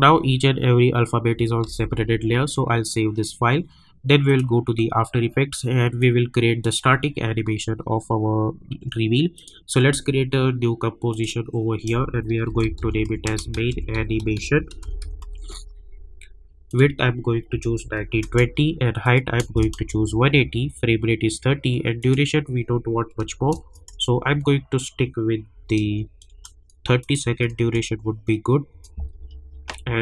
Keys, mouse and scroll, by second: 1.6 ctrl+s, 4.2-9.1 drag, 9.3 click, 12.2-15.7 typing, 16.7 click, 19.0 click, 22.0 click, 23.2 Left, 25.5 Right, 27.0 click.